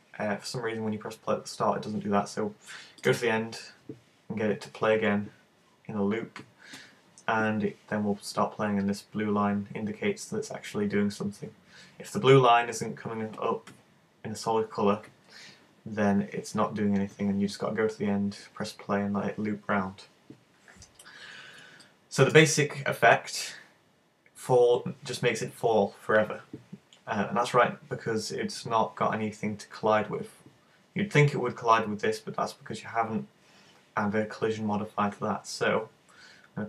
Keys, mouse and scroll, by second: 3.1 click, 21.9 middle click, 23.0-23.4 scroll down 3, 23.9-24.3 scroll up 3.